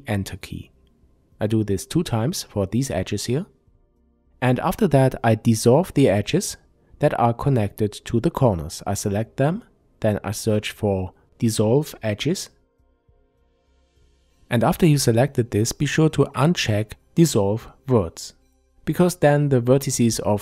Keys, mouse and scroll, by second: 1.8 Return, 3.6 click, 4.7 shift+click, 5.5 shift+click, 6.3 shift+click, 6.7-7.1 scroll down 1, 7.2-17.6 shift+middle drag, 7.9-9.4 scroll down 1, 9.4 F3, 10.5 s, 17.2-17.6 scroll down 2, 17.6 click.